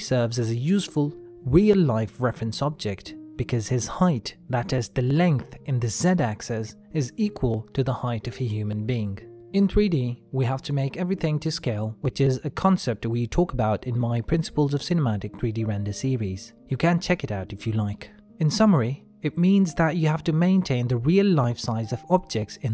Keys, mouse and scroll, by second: 1.3 n, 3.2 click, 7.6 middle click, 9.0 shift+middle click, 9.8 ctrl+middle click, 10.8 middle click, 17.1 ctrl+middle click, 18.3 shift+middle click, 21.6 KP_1.